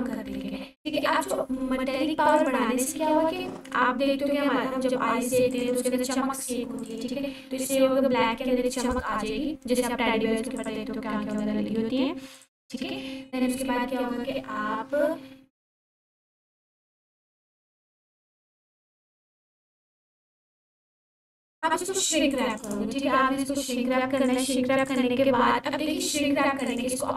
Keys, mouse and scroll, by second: 1.4 s, 2.3 click, 5.5-11.5 drag, 19.5 click, 22.3 click.